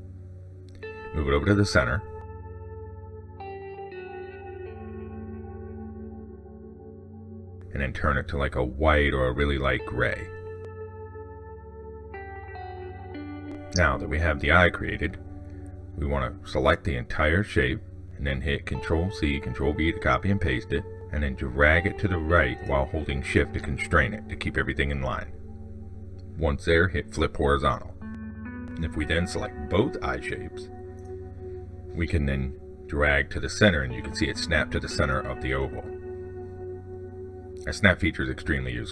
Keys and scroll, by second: 18.9 ctrl+c, 19.3 ctrl+v.